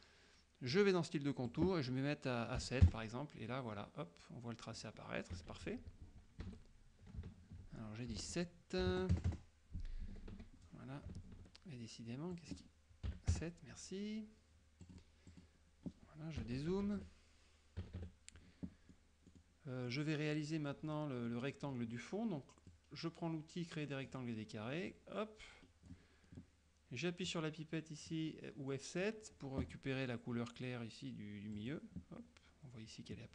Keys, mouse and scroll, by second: 0.8 click, 1.6 click, 2.7 KP_7, 2.9 KP_Enter, 5.4 KP_Subtract, 6.5 Escape, 8.3 ctrl+a, 9.0 KP_Enter, 10.1 Escape, 12.4 click, 13.1 KP_7, 13.4 KP_Enter, 14.9 click, 15.3 click, 16.5 KP_Subtract, 17.8 KP_Subtract, 19.0-20.2 middle drag, 21.0 middle click, 22.8-24.3 drag, 25.0 click, 27.3 click, 31.6 click.